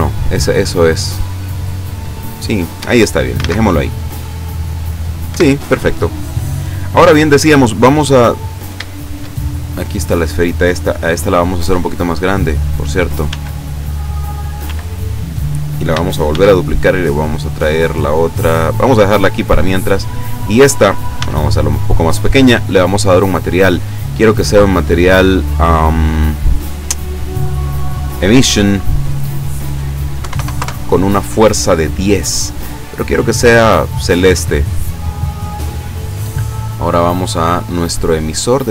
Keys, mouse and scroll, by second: 2.1-2.7 scroll down 4, 5.4 Escape, 7.2-7.9 scroll down 4, 8.3-8.7 scroll up 2, 9.0 shift+middle click, 9.6 shift+right click, 12.4 click, 13.3 s, 14.3 click, 14.7 s, 15.4 click, 16.4 shift+d, 18.9 click, 20.0 right click, 21.2 s, 22.4 click, 23.3 click, 24.0 click, 28.6 click, 29.4 click, 30.2 KP_1, 30.4 KP_0, 30.6 KP_Enter, 32.6 click, 33.5-34.8 drag, 35.7-36.4 scroll up 1, 36.5-37.1 scroll up 2, 37.4 right click.